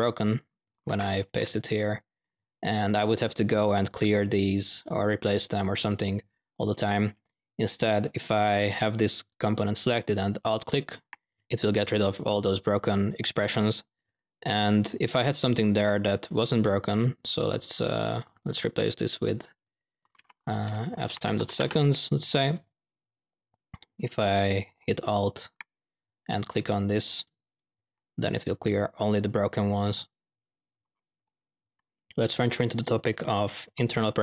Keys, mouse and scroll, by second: 0.1-1.1 drag, 1.1 typing, 1.4 click, 3.1 click, 5.4 click, 6.5 middle click, 8.5-9.1 drag, 9.1-9.6 drag, 10.6 alt+click, 11.4 y, 14.6 ctrl+z, 18.2 click, 19.1-19.9 drag, 23.7 click, 24.9 alt+click, 27.1 alt+click, 27.8-28.2 middle drag, 28.3-29.2 middle drag.